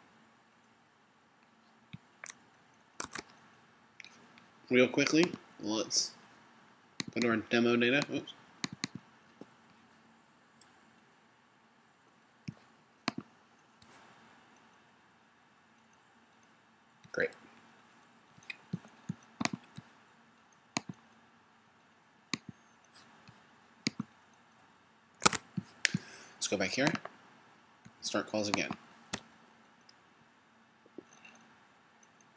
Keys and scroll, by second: 3.3 super+Tab, 25.5 super+Tab.